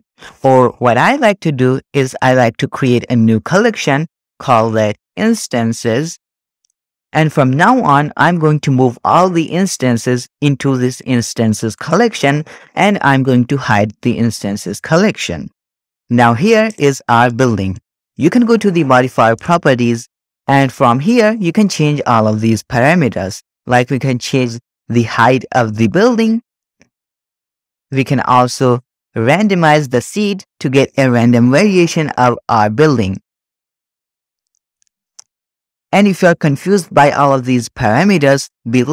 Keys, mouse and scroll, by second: 2.0-2.7 drag, 3.5 right click, 4.2-6.5 drag, 9.4 click, 14.2 click, 15.4-15.8 drag, 16.7 drag, 17.7 shift+middle click, 19.3 click, 20.2-20.7 scroll down 9, 22.7-23.2 scroll down 2, 22.9 middle click, 24.0-24.3 scroll up 1, 24.3-27.9 shift+drag, 28.4-29.4 scroll down 1, 29.4-32.0 drag, 29.4-31.5 scroll down 1, 32.4-33.1 scroll down 1, 33.1-34.4 drag, 34.7-35.5 scroll down 3, 35.8-38.9 drag.